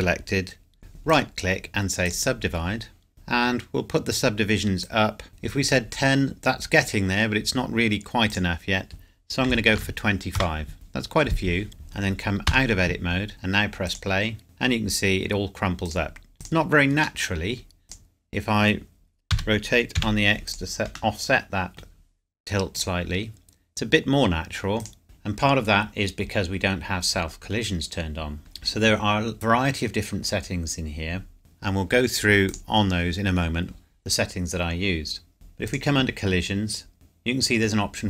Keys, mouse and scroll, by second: 1.1 right click, 2.1 click, 8.3 click, 9.5 KP_2, 9.7 KP_5, 10.3 KP_Enter, 11.7 click, 12.5 Tab, 13.9 click, 15.9 click, 17.2 middle click, 17.8 click, 19.3 r, 19.9 x, 20.5 click, 21.1 middle click, 22.7 click, 25.0 ctrl+z, 26.1 scroll down 1, 28.4 scroll up 1, 31.4 click, 32.5 click, 33.9-35.3 scroll up 1, 35.3-35.7 scroll down 1, 35.7 click, 36.3-36.9 scroll down 1.